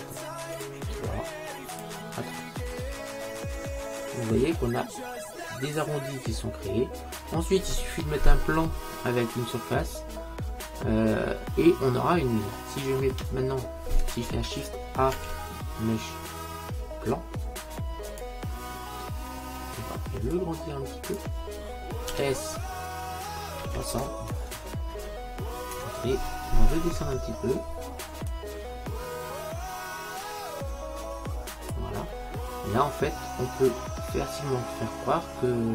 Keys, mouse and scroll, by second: 2.9-4.5 middle drag, 4.9-6.9 middle drag, 7.0 middle click, 9.8-12.1 middle drag, 15.2 shift+a, 20.4 click, 22.2 s, 28.4 click, 32.2-34.1 middle drag.